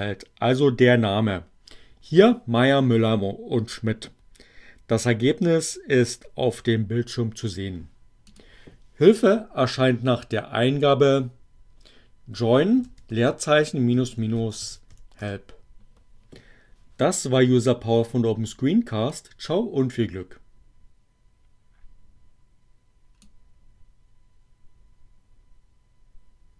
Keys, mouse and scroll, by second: 8.3 click, 12.0-15.4 typing, 19.1-23.4 drag.